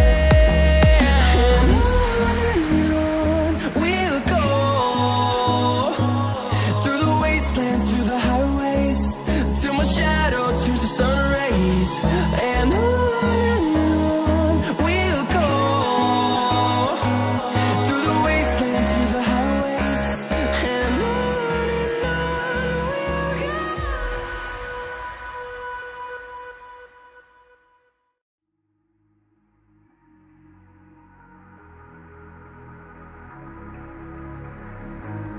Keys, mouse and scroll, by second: 1.1 shift+right click, 1.9 click, 5.3 click, 6.1 scroll up 1, 6.7 click, 7.2 ctrl+c, 7.3 ctrl+v, 8.2 click, 10.7 right click, 11.3 click, 13.3 scroll down 1, 14.1 click, 16.3 click, 18.3 click, 20.1 scroll down 1, 21.0 scroll up 1, 21.4 click, 25.5 ctrl+c, 25.7 ctrl+v, 26.7 click, 33.4 double click, 35.0 click.